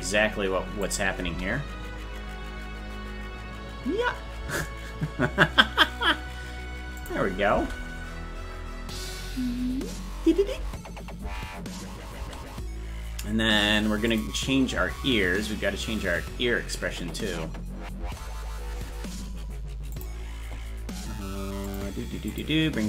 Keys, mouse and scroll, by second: 0.8 click, 1.2 space, 4.7 space, 7.0 click, 7.5 space, 12.0 space, 14.1 click, 14.7 space, 19.9 click, 21.6 click, 22.3 click.